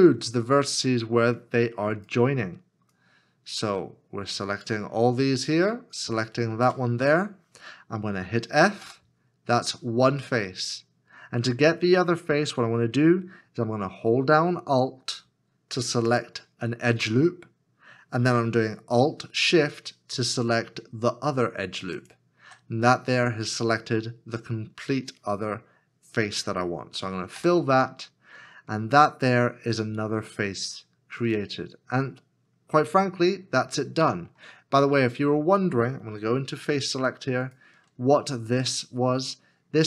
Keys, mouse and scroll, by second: 0.5 scroll, 0.7-1.2 scroll up 1, 1.4 shift+click, 2.9 shift+click, 4.9-5.7 scroll down 1, 6.0 shift+l, 16.1 alt+click, 22.0 alt+shift+click, 27.4 f, 33.0 middle click.